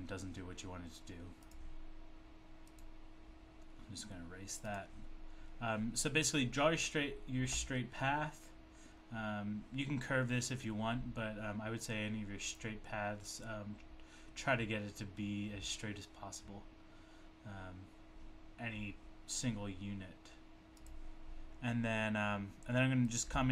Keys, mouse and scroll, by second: 1.4 click, 2.6 click, 4.7 click, 12.5 click, 20.8 click, 23.3 click.